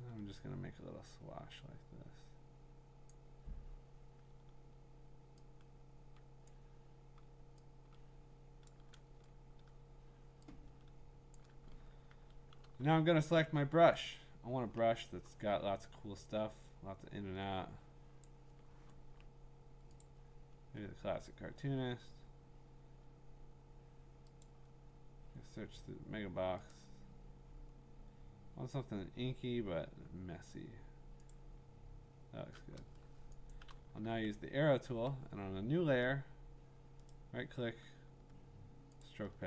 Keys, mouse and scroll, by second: 3.1 click, 6.5 click, 8.7 click, 11.4 click, 12.1-12.6 typing, 14.0 right click, 14.7-15.6 scroll, 18.2 click, 19.2-19.6 scroll, 20.0 click, 20.4-22.2 scroll, 24.4 click, 24.8-25.3 scroll, 25.8-26.7 scroll, 26.7 click, 26.7-29.7 scroll, 31.3 click, 33.4 click, 33.5 click, 33.5 click, 33.7 click, 33.9-36.6 a, 37.1 right click, 39.0 click.